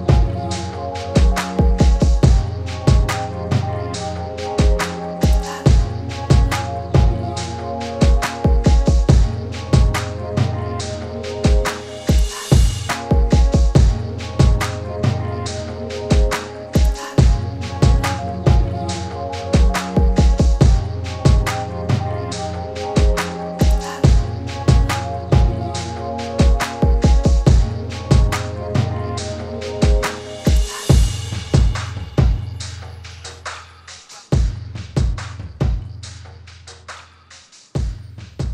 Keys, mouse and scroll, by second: 5.1 click, 7.3-12.2 drag, 12.2 typing, 12.5-20.9 drag, 21.7-22.4 typing, 22.7-28.0 drag, 28.4-31.0 drag.